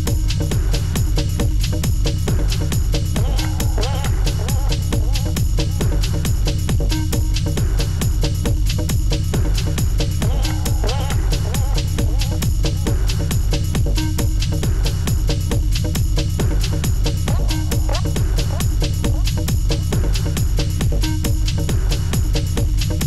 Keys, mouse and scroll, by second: 3.0 alt+click, 8.9 Return, 9.6 Return, 9.9 alt+click, 12.6 Return, 13.1 space, 13.4 space, 13.6 alt+scroll up 2, 13.8 space, 14.2 alt+scroll down 1, 14.9-15.4 scroll up 10, 16.4-17.9 typing, 16.8 Caps_Lock, 19.1 ], 19.2 double click, 19.4 double click, 19.7 double click, 19.9 ], 20.2 double click, 20.4 double click, 21.6 alt+scroll down 1.